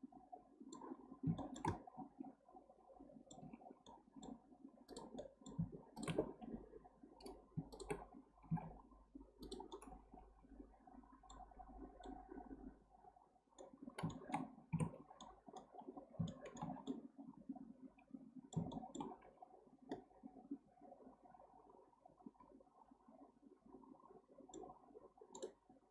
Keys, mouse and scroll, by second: 0.9-1.4 scroll up 4, 1.4-3.5 shift+middle drag, 3.5 Tab, 3.9 middle click, 4.2 middle click, 4.9 click, 5.2-6.0 middle drag, 6.0 shift+click, 7.7 shift+click, 8.4 g, 9.7-11.7 middle drag, 11.7-12.0 scroll down 3, 11.8-14.8 middle drag, 14.8 Tab, 15.2-15.8 middle drag, 15.8-16.3 scroll down 5, 16.3-19.3 shift+middle drag, 19.3-19.9 scroll up 4, 19.9-22.9 middle drag, 24.8-25.3 scroll down 3, 25.3-25.9 right drag.